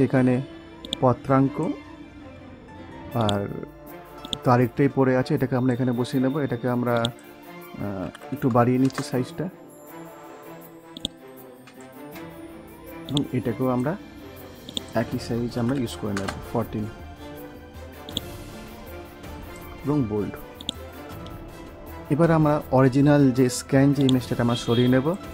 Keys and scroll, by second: 8.7 Return, 16.1 Return.